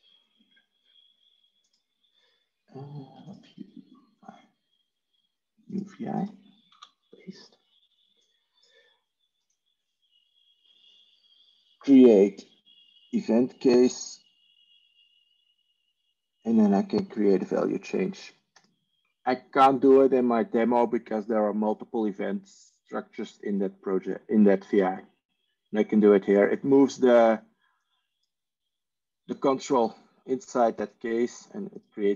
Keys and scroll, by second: 6.6 ctrl+v.